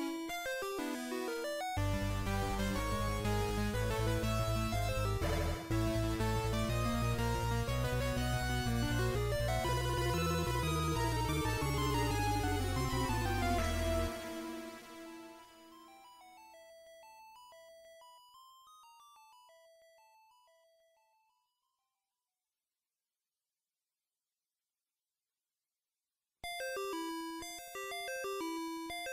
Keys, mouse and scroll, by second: 1.1 click, 2.2 scroll up 2, 3.0 middle click, 4.9 KP_1, 5.2 z, 6.9 s, 9.8 click, 10.1 right click, 11.2 z, 12.2 middle click, 16.3-17.5 scroll up 1, 17.7 click, 18.9 click, 22.1 middle click, 25.1 click, 25.6-27.3 click, 27.6 click, 28.3 click.